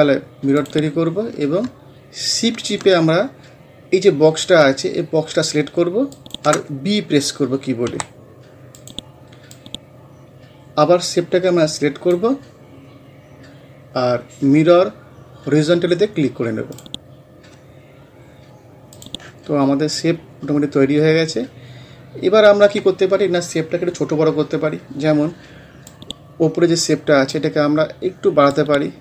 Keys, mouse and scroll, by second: 0.6 click, 6.2 shift+click, 7.9 b, 8.8-14.7 drag, 16.7 click, 20.9 scroll up 1, 21.8 scroll down 1, 25.9-29.0 drag.